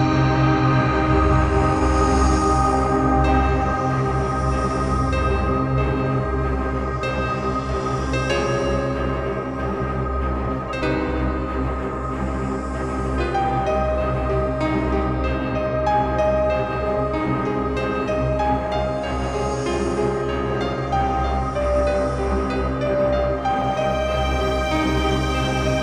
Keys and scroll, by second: 4.0 ctrl+t, 8.4 shift+Return, 10.7 ctrl+alt+shift+t, 11.4 t, 14.2 ctrl+alt+shift+t, 23.6 ctrl+e, 24.1 ctrl+z.